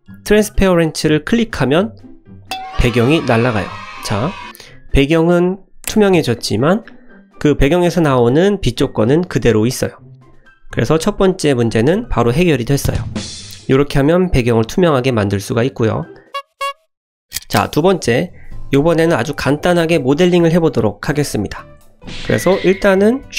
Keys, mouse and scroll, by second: 2.4 click, 4.1 click, 5.5 click, 6.5 click, 6.8 middle click, 8.8-10.0 middle drag, 10.2 click, 21.0 KP_0, 21.8 click, 21.9 middle click.